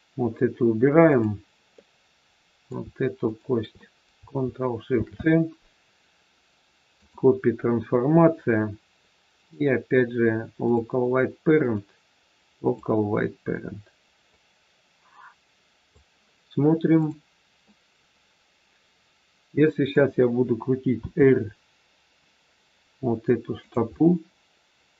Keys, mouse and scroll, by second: 1.0 click, 1.7 middle click, 3.2 shift+click, 3.3 shift+click, 4.8 ctrl+shift+c, 8.0-9.3 scroll down 4, 9.3 click, 11.6 click, 17.6 middle click, 20.9 r, 23.9 middle click.